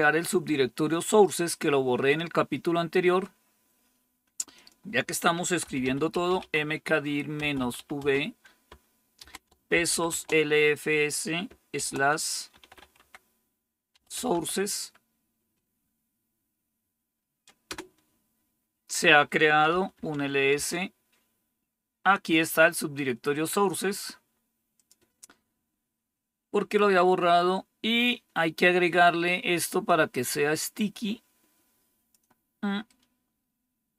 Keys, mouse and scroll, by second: 4.5 click, 5.3-10.5 typing, 11.7-14.7 typing, 17.6 Return, 19.6 typing, 20.5 Return, 22.9-25.4 drag, 29.8-32.1 drag, 32.8-33.9 right drag.